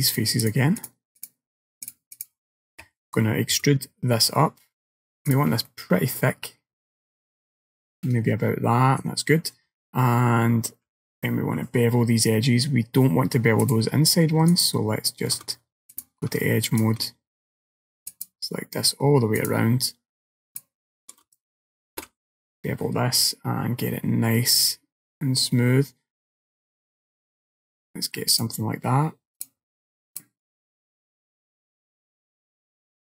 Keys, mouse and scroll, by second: 0.2 click, 0.5 click, 0.9 click, 1.2 click, 1.9 click, 2.2 shift+click, 3.6 e, 5.7 middle click, 7.2-7.6 scroll down 1, 7.6 middle click, 10.9 ctrl+b, 14.6 alt+click, 16.0 click, 16.7 alt+click, 18.1 alt+shift+click, 19.5 alt+click, 20.6 alt+shift+click, 22.0 ctrl+b, 29.4 right click, 30.2 click, 30.6 middle click.